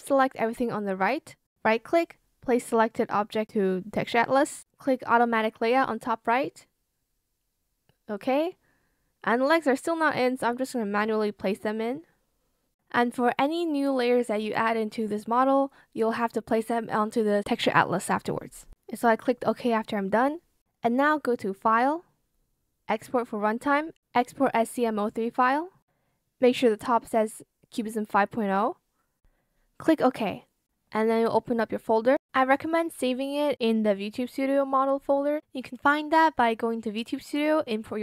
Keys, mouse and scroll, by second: 0.8 shift+click, 13.8 z.